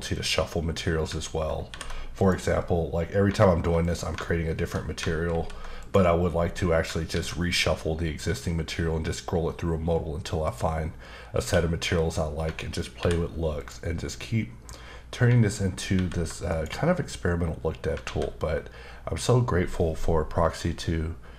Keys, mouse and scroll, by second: 0.1 click, 1.7 alt+m, 2.2 click, 3.8 double click, 5.2 alt+m, 5.8 click, 7.1 alt+a, 10.4 click, 11.4 q, 12.9 alt+m, 13.6 click, 15.9 alt+m, 16.5 click, 18.0 alt+a.